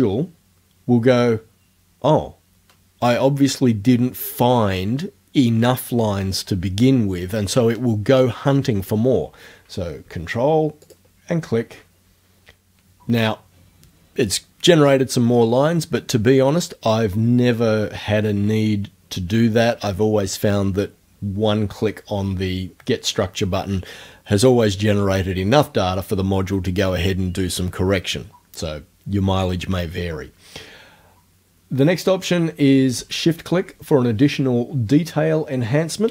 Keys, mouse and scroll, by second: 10.9 ctrl+click.